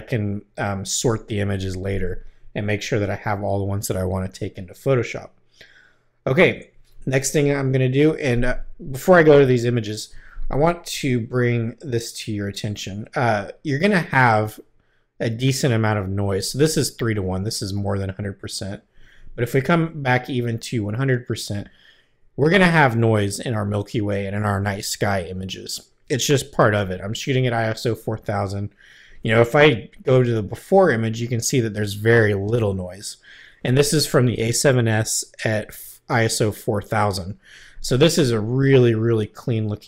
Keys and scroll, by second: 6.3 Left, 9.3 Right, 30.0 \.